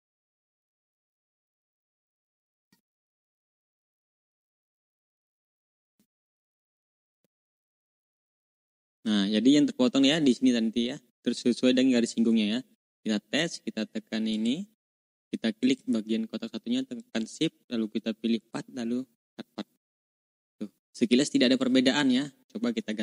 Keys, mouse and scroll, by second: 1.5 ctrl+scroll up 2, 3.2 shift+click, 4.3 click, 5.5 click, 6.8 shift+click, 7.4-7.9 ctrl+scroll down 2, 8.5 click, 9.0 ctrl+scroll down 2, 9.3-9.9 ctrl+scroll up 4, 10.3 ctrl+scroll down 2, 12.3 ctrl+scroll down 2, 14.2 click, 16.9 shift+click, 18.3 click, 21.5 ctrl+click, 22.7 Delete.